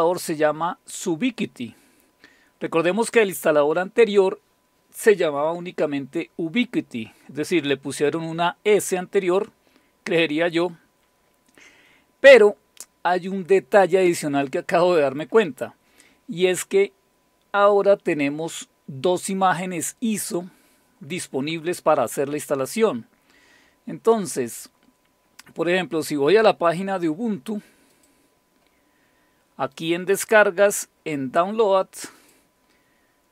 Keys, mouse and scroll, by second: 9.6-10.8 scroll down 2, 10.8-12.0 scroll up 2, 12.0-15.2 scroll up 1, 22.6 click, 27.9 click, 28.4 click, 29.7 click, 32.2 click.